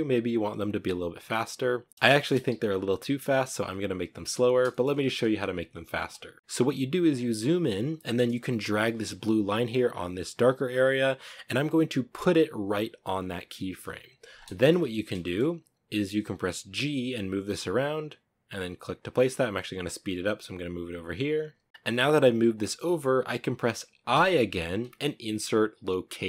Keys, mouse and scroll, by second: 0.4 right click, 1.9 a, 3.3 right click, 4.0 shift+middle drag, 4.3-4.7 scroll up 2, 5.3 space, 6.3-13.5 drag, 13.5-13.9 scroll down 4, 13.9-15.1 shift+middle drag, 15.1-15.8 scroll down 1, 15.8 g, 18.3 g, 21.2 space, 21.7 g, 21.8-25.8 shift+middle drag.